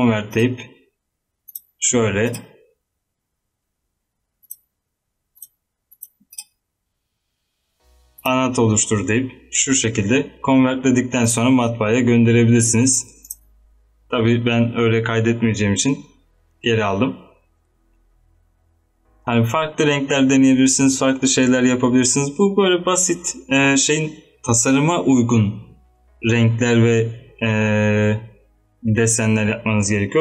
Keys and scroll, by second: 12.4 ctrl+Num_Lock, 12.7 z.